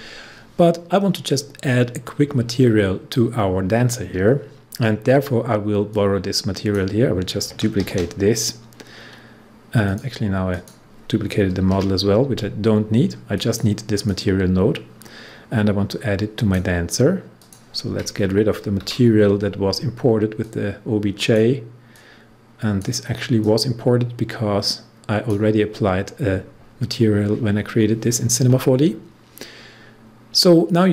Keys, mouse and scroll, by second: 5.9-7.8 drag, 7.8 ctrl+d, 9.8 click, 11.6 Delete, 13.3-17.4 drag, 18.7 Delete, 20.4-27.6 drag, 29.5 scroll up 1.